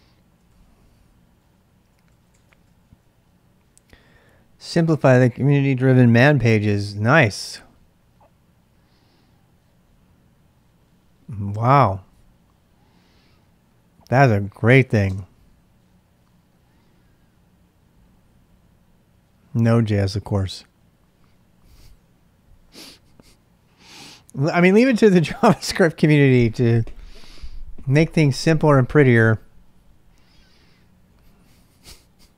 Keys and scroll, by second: 0.0-2.8 typing, 15.0 space.